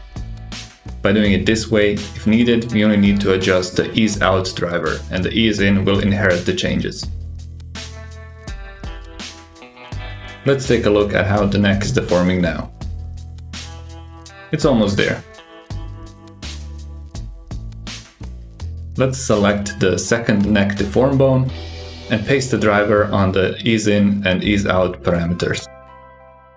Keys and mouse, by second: 2.5 click, 5.8 click, 7.8 click, 8.2 g, 13.9 shift+drag, 14.4 ctrl+click, 15.7 click, 16.2-16.9 ctrl+drag, 17.0-17.4 shift+drag, 17.7 ctrl+click, 20.4-21.7 drag, 23.1-24.5 drag, 26.3 click.